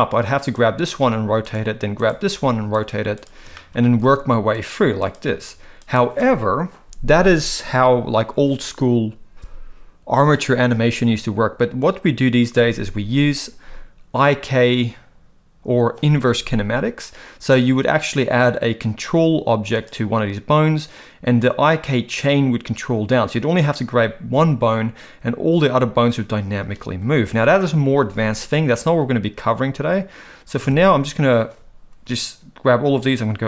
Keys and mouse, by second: 0.9 r, 2.3 r, 3.5 middle click, 4.0 r, 5.0 click, 5.3 r, 19.7 click, 23.6 click, 30.6 a.